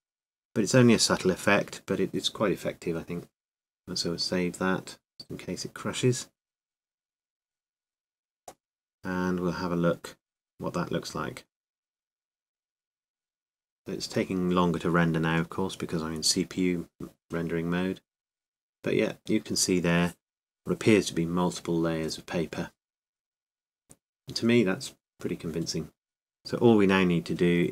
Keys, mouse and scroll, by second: 1.4 Tab, 2.5 Tab, 4.1-5.7 drag, 7.8 a, 8.3 a, 9.1 a, 11.4-13.5 drag, 17.9-22.4 middle drag.